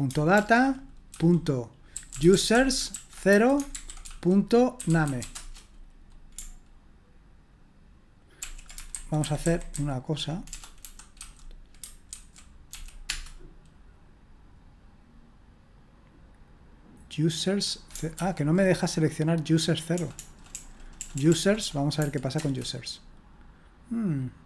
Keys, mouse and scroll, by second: 0.4 ctrl+p, 1.1-5.7 typing, 8.4 ctrl+p, 8.9 alt+b, 9.2 alt+b, 9.4 alt+b, 12.1-13.5 typing, 18.2 ctrl+p, 19.9-22.0 typing, 22.4 Return.